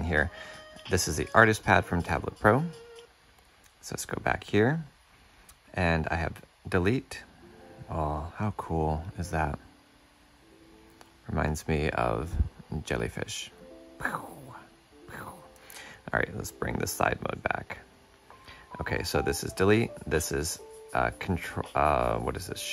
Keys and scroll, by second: 1.4 ctrl+z, 16.9 shift+super+q.